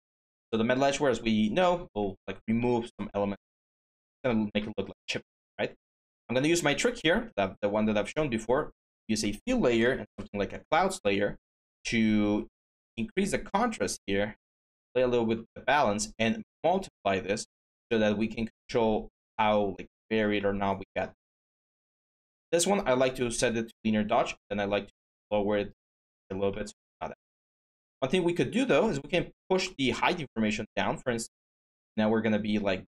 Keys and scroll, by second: 9.5-10.3 typing, 14.7-15.5 typing.